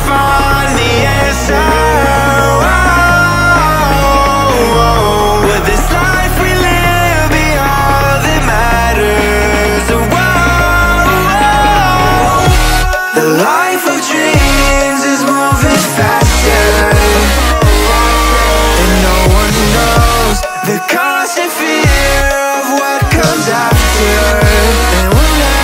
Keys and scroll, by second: 0.9 ctrl+shift+], 6.3 ctrl+[, 8.0 ctrl+shift+[, 8.4 ctrl+], 16.7 space.